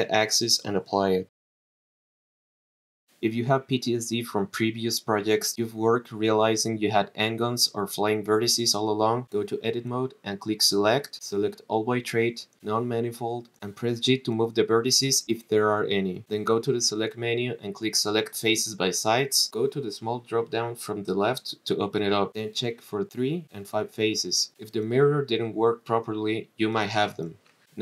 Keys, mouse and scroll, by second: 0.1 click, 0.3 click, 0.9 click, 2.1 click, 3.3 click, 4.6 click, 6.2 click, 6.7 click, 7.5 click, 8.9 click, 9.5-10.1 drag, 11.0-13.1 drag, 14.4 g, 17.4 click, 17.9-20.1 drag, 21.4 click, 22.3 click, 24.0 click, 24.4 click, 26.8 click, 27.7 click.